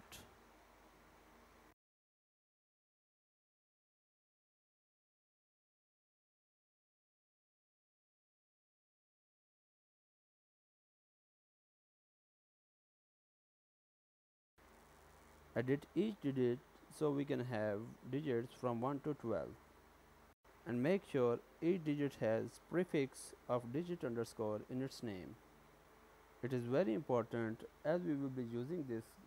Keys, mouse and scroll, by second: 0.5-3.1 typing, 4.4 click, 6.8 shift+d, 7.9 shift+d, 10.0 click, 11.9 click, 14.4 click, 15.6 Tab, 16.8 BackSpace, 16.9 2, 18.9 click, 19.2 click, 27.0 Tab, 28.3 click.